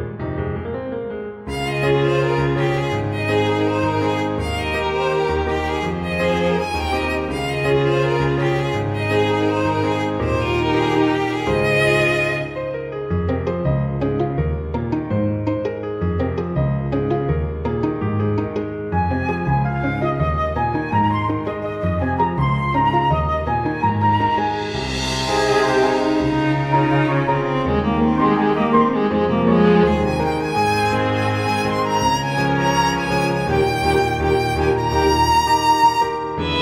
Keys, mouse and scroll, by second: 0.3 click, 2.4 click, 2.8-3.2 scroll up 2, 4.3 click, 4.9 click, 13.2 click, 13.8 click, 18.0 click, 22.9 click, 23.6 click, 26.3 click, 31.1 click, 33.1 click.